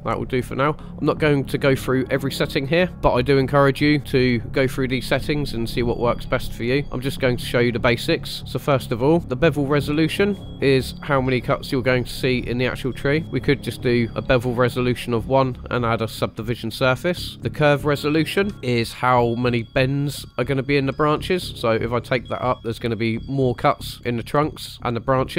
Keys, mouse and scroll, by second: 4.2 click, 8.2 middle drag, 8.4 scroll up 2, 8.8-9.1 shift+middle drag, 10.0 click, 10.5 click, 10.9 click, 13.2 click, 18.4 KP_1, 18.5 scroll down 2, 21.4 click, 22.2 click, 22.5-23.5 scroll up 1.